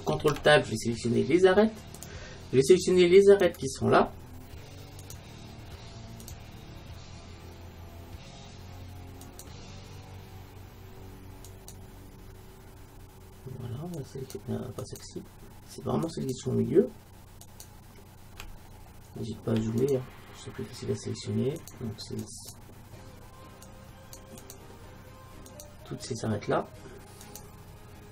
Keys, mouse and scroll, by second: 0.2 ctrl+Tab, 3.3-8.3 right drag, 9.3-13.7 right drag, 14.0-19.5 right drag, 18.8 middle click, 19.0 middle click, 19.2-21.7 middle drag, 19.9-28.1 right drag.